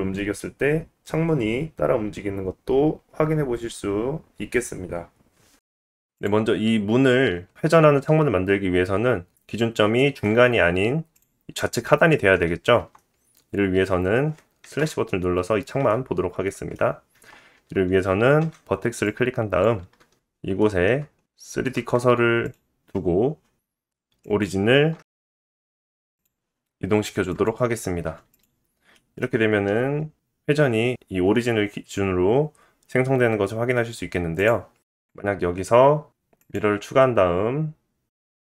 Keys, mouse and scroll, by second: 0.0 click, 0.4 click, 1.0 g, 5.7 scroll down 1, 5.7 r, 5.9-11.1 ctrl+middle drag, 6.3 ctrl+z, 9.3-9.7 scroll up 2, 10.4-11.1 scroll up 2, 11.1 click, 11.2-15.1 middle drag, 12.8 Tab, 14.8 /, 15.9 middle click, 17.1 Tab, 17.6 Tab, 17.6-19.1 middle drag, 18.4 1, 19.1-27.5 drag, 20.4 shift+s, 20.7 shift+s, 23.2 Tab, 23.6 ctrl+z, 27.5-28.3 middle drag, 28.3 click, 28.4-34.3 middle drag, 29.3 r, 33.1 ctrl+z, 34.3 KP_1, 35.3 click, 36.0 click, 36.5-38.4 drag.